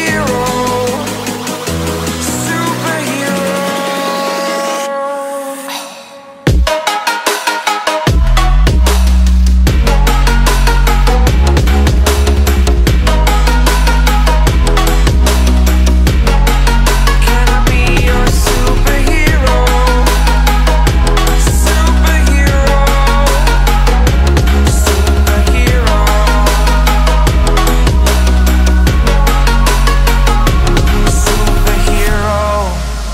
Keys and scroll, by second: 7.6 v, 13.4 space, 14.0 alt+super+space, 14.0 alt+super+space, 14.4 alt+super+space, 14.6 alt+super+space, 14.7 alt+super+space, 14.9 alt+super+space, 15.0-15.4 alt+super+space, 15.4-16.3 typing, 18.6 super+z, 19.4 super+space, 19.5-21.5 super+space, 23.6 super+z, 29.0 space, 29.5 alt+super+space, 29.6 alt+super+space, 29.9 alt+super+space, 30.2 alt+super+space, 30.2-30.7 typing.